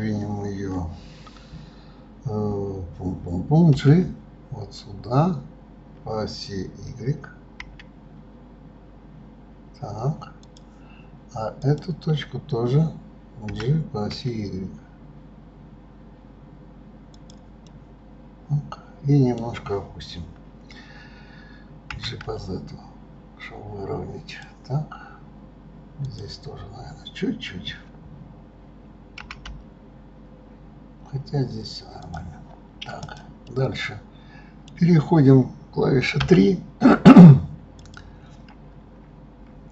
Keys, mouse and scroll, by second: 11.5 click, 13.5 g, 17.6-20.7 middle drag, 26.0 click, 33.0 click, 33.1 right click, 33.4-36.2 middle drag, 36.2 3, 37.7 click.